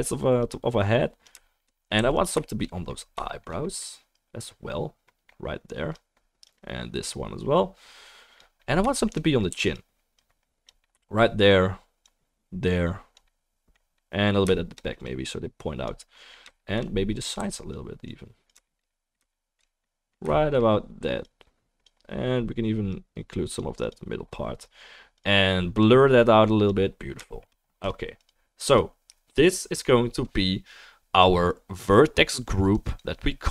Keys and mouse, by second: 2.2-33.5 shift+right drag, 2.2 f, 2.7-9.7 middle drag, 4.1-9.7 drag, 9.7 f, 10.2-17.7 drag, 14.2-33.5 shift+middle drag, 17.5 f, 18.0-31.2 drag, 32.7 click, 33.0-33.5 drag.